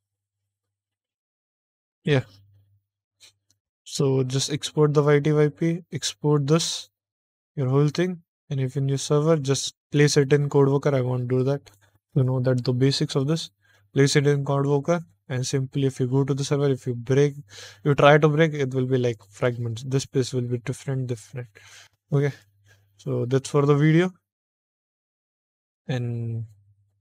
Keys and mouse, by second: 8.9 shift+middle click, 11.3 middle click, 12.0 middle click, 12.7 shift+middle click, 15.0 shift+middle click, 15.4 middle click, 19.1 middle click, 19.3 middle click, 22.3 middle click, 23.0 middle click, 24.0 middle click, 24.5 middle click, 24.6 middle click.